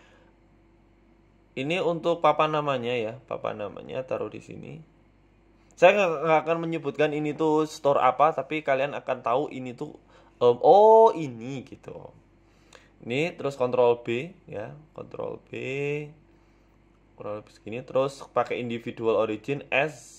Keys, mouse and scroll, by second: 0.7 s, 2.6 g, 3.9 s, 6.7 scroll up 3, 6.9 shift+middle click, 7.1 Tab, 8.4 Tab, 8.6 g, 10.0 Tab, 12.0 click, 12.5 click, 13.0 shift+click, 14.9 ctrl+b, 19.8 click.